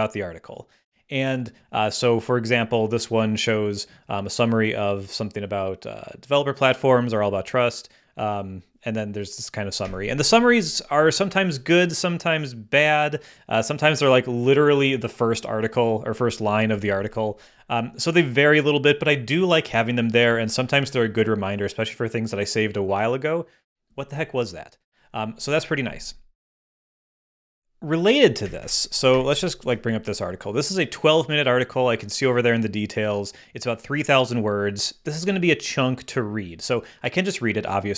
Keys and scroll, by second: 9.8 Up, 12.7 Up, 15.1 Up, 16.7 Down, 20.2 Down, 28.4 Up.